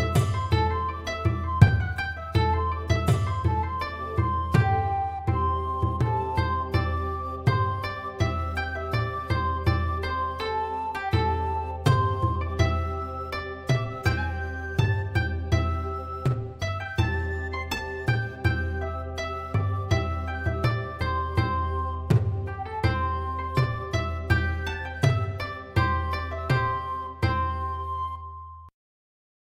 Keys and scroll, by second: 15.0-16.2 typing.